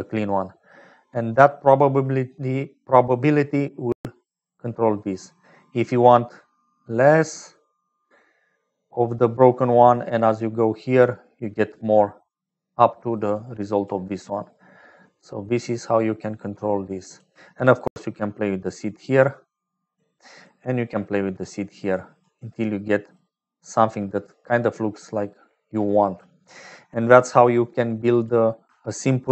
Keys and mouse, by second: 1.5-12.6 drag, 13.1 click, 14.5-17.1 drag, 17.8 click, 18.8 click, 20.3 middle click, 21.6-22.7 drag, 22.9 click, 26.2 middle click, 27.5 click, 29.2 ctrl+j.